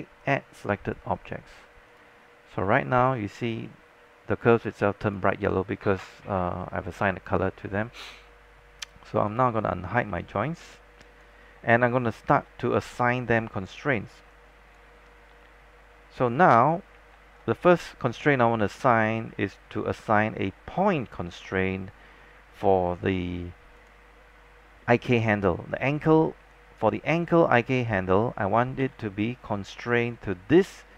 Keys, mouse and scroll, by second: 1.9 click, 2.7 alt+click, 3.4 scroll up 1, 3.8 alt+middle click, 4.6 scroll down 1, 4.8-6.0 alt+drag, 10.2 alt+click, 11.5 scroll up 1, 11.7 alt+middle click, 12.2 alt+click, 12.6 alt+middle click, 13.3 scroll up 1, 13.4 alt+click, 14.1 scroll down 1, 14.5 alt+click, 15.3-17.0 scroll up 1, 17.2 alt+middle click, 17.7 alt+click, 18.2 alt+middle click, 19.0 scroll up 1, 19.4 alt+middle click, 22.4-23.9 scroll up 1, 23.9 click, 25.9-26.5 scroll down 1, 26.5 alt+click, 28.9 w, 30.7 click.